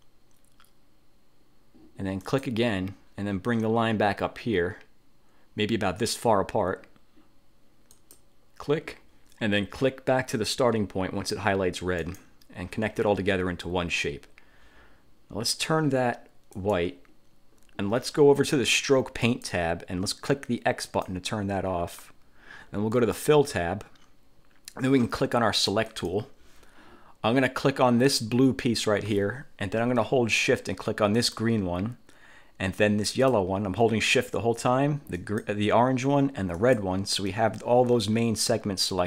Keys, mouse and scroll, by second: 2.3 click, 8.0 click, 12.1 click, 16.7 click, 19.4 click, 21.0 click, 23.1 click, 26.0 click, 28.2 click, 31.3 shift+click, 33.2 shift+click, 35.3 shift+click, 36.7 shift+click.